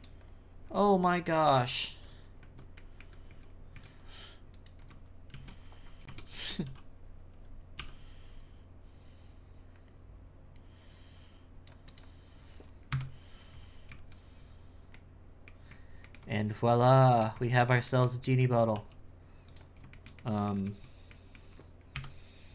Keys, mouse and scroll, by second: 0.6-1.5 scroll down 7, 1.5 middle click, 2.1-2.4 scroll up 1, 2.4 Tab, 2.7 middle click, 3.3 z, 3.7 z, 4.5 right click, 5.3 shift+s, 6.3 Tab, 6.6 w, 7.8 w, 12.9 KP_1, 13.5-13.9 scroll up 4, 13.9 z, 14.9-16.1 middle drag, 16.3-17.0 scroll up 2, 17.0 shift+middle click, 17.9 middle click, 18.7 w, 19.9 shift+middle click, 20.6 z, 21.1 middle click, 21.9 KP_1.